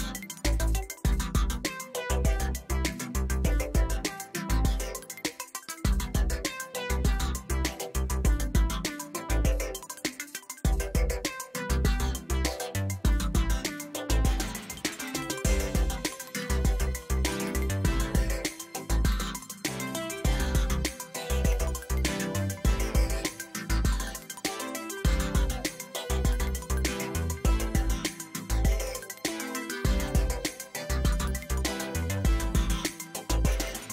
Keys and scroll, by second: 0.0 space, 0.6 space, 0.9 space, 2.7 space, 10.4 ctrl+b, 18.1 space, 18.6 space, 25.4 ctrl+t, 26.8 space, 33.0 space, 33.7 space.